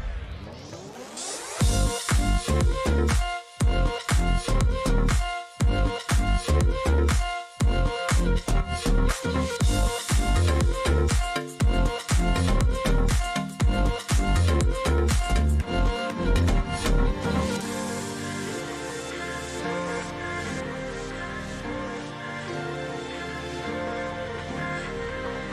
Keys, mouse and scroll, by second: 0.4 click, 0.6 click, 2.4 click, 3.2 click, 3.9 click, 4.9 click, 5.1 click, 6.4 click, 7.8 click, 8.6 click, 10.2-11.4 drag, 12.7 click, 14.7 click, 15.3-16.3 drag, 17.1-19.3 drag, 19.0 ctrl+c, 19.3 ctrl+v, 21.9-23.0 drag, 22.9-23.3 BackSpace, 23.9 click, 24.6-25.5 typing, 24.7 click.